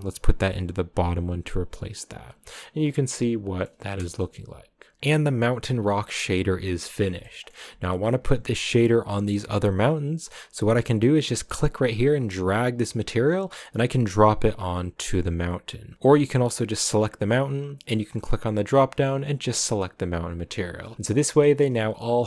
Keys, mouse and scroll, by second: 2.6-3.9 middle drag, 3.9 KP_0, 4.9 scroll down 3, 4.9-6.1 shift+middle drag, 6.1-7.0 scroll up 1, 7.2 shift+middle click, 8.2-9.7 scroll up 1, 14.9 click, 16.1 right click, 18.2-20.8 drag, 20.8 scroll down 2, 20.9 a, 21.5-22.2 shift+middle drag.